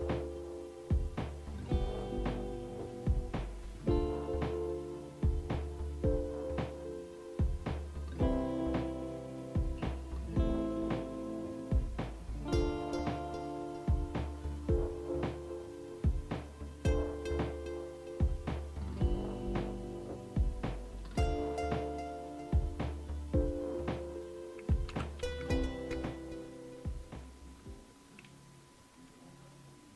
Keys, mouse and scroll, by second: 24.9 Down, 25.9 Return.